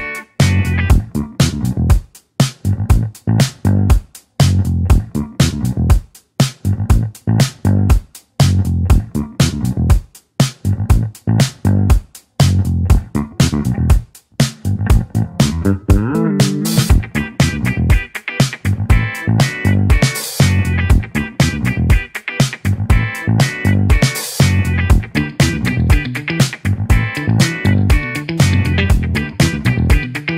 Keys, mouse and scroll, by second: 0.0-3.0 drag, 3.0 Tab, 5.4-6.5 drag, 6.5 Tab, 7.5-8.3 drag, 8.3 Tab, 9.5-12.7 drag, 12.7-14.1 scroll down 1, 14.1 scroll down 15, 14.2 click, 17.4-18.0 scroll down 2, 18.0-19.6 middle drag, 19.6-20.1 scroll up 1, 20.1 scroll up 1, 21.9-24.8 right drag, 24.8-27.8 drag, 30.0-30.3 right drag.